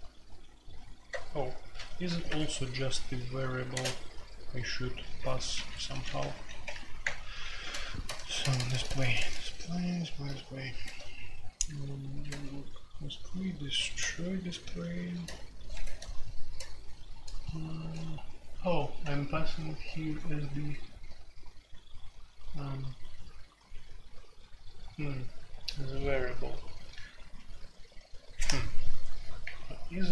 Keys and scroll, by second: 1.1-1.9 BackSpace, 2.1 alt+1, 2.3 Escape, 3.6 space, 3.7 Tab, 5.3-12.6 typing, 7.0 Return, 13.7 typing, 15.2-19.8 typing.